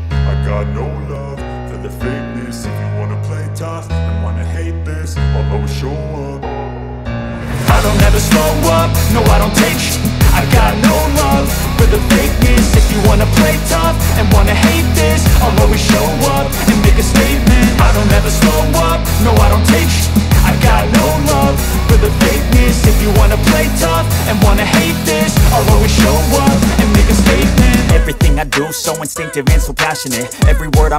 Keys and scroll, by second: 2.5 Escape, 5.2 F4.